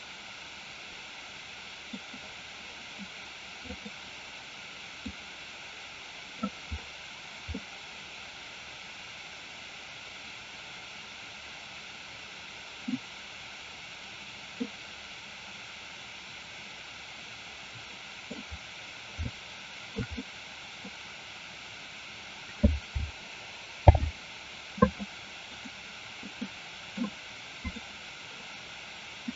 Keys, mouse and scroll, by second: 5.2-6.4 drag, 7.6-12.9 middle drag, 14.8-18.3 middle drag, 19.3-20.0 shift+middle drag, 20.3 middle click, 24.1 alt+h, 25.7 click, 26.5 middle click, 27.6 click.